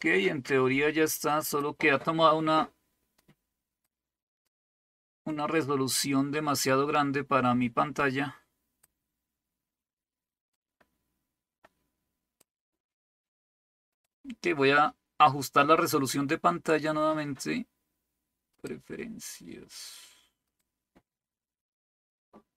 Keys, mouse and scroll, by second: 0.0-1.6 drag, 3.2 click, 4.4-8.8 drag, 10.5-12.4 drag, 13.9 click, 18.5 click, 20.5 click.